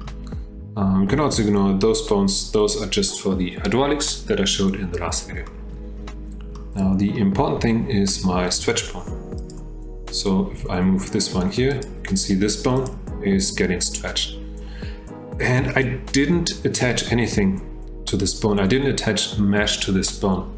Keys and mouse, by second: 5.5 shift+drag, 6.5 click, 9.4 click, 10.5 g, 12.7 click.